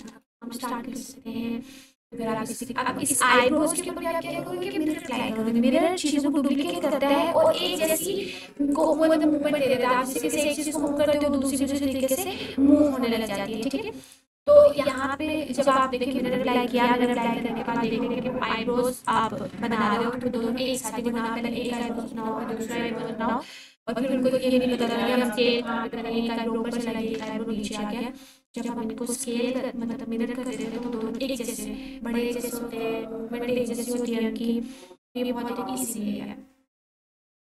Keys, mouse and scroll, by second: 0.0 shift+d, 1.7 x, 3.3 right click, 4.9 click, 5.3 g, 6.7 click, 14.9 click, 16.2 g, 17.1 click, 17.4-18.4 typing, 19.0 click, 19.5 g, 20.9 x, 21.7 click, 22.1-22.8 scroll down 1, 22.8 s, 24.7 click, 25.3 s, 27.1 s, 27.5 z, 28.5 click, 29.1 g, 29.7 x, 30.5 click, 31.0 s, 32.4 x, 33.9 click.